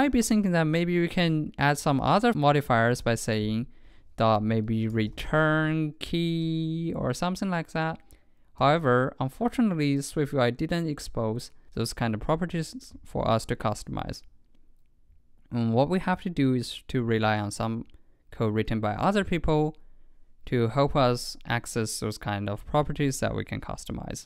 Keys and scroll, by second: 0.2 super+Right.